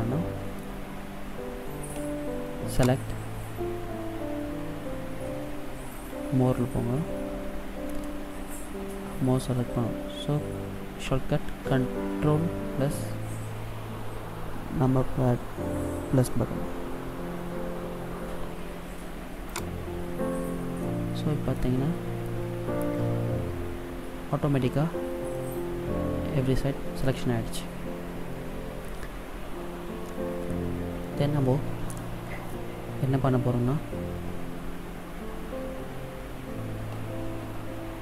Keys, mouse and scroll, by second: 0.0 middle click, 1.0-1.5 scroll down 2, 3.0 click, 21.0 middle click, 22.0-23.7 scroll up 2, 25.0-25.5 scroll down 1, 25.5 middle click, 27.5-28.2 scroll down 1, 28.2 scroll down 1.